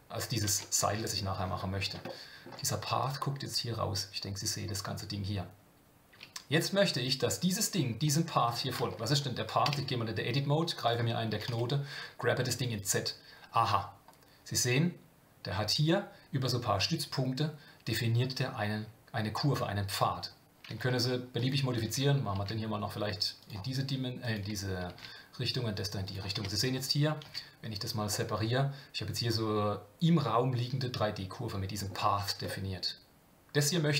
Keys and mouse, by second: 0.5 Tab, 0.8-1.2 middle drag, 2.1-2.4 shift+middle drag, 3.0 click, 8.0 click, 8.9 shift+middle drag, 9.6 Tab, 11.3 g, 21.4 click, 24.3-26.3 drag, 26.3 Tab, 27.2 KP_Divide, 28.1-31.9 middle drag, 32.5-33.9 middle drag.